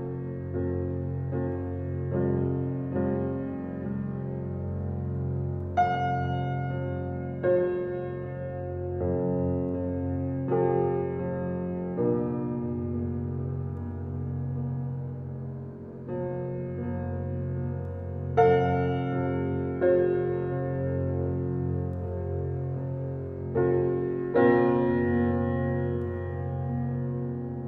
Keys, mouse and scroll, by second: 5.7 right click, 6.4 click, 10.3-13.0 drag, 12.8-14.3 typing, 15.3-20.4 drag, 20.4-21.3 typing, 22.4 Return, 23.6 click, 26.4 click.